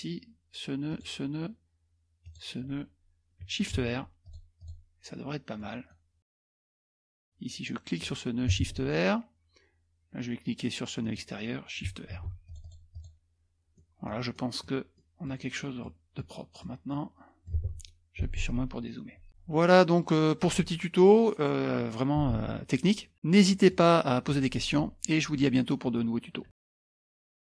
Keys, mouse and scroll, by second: 0.9 shift+click, 2.2 shift+click, 3.8 shift+r, 4.2 click, 4.9 click, 5.6-6.3 scroll down 4, 5.7 middle click, 6.3-6.9 scroll up 1, 6.9 click, 8.0 click, 8.7 shift+r, 11.0 click, 12.5-13.5 drag, 13.7-15.2 scroll up 2, 14.8 middle click, 15.2 middle click, 16.0-17.3 scroll down 4, 16.9 middle click, 17.1 middle click, 17.3 middle click, 19.3 click, 19.7 middle click, 23.1 middle click, 23.4 middle click, 23.5 scroll up 1.